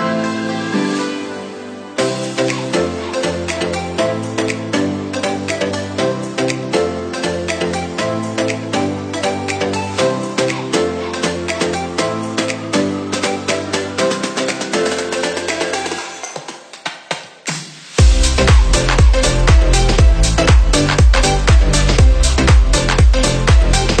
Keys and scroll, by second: 0.7 Right, 2.1 Up, 9.8 Left, 11.1 Down, 11.6 Left, 21.6 Left.